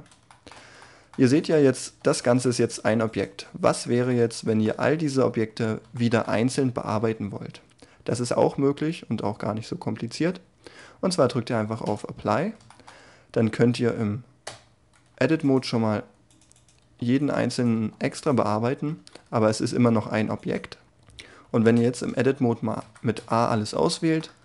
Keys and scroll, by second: 1.3 r, 2.7 g, 13.9 Tab, 15.9 g, 18.8 Tab, 19.6 g, 21.6 Tab, 22.8 a.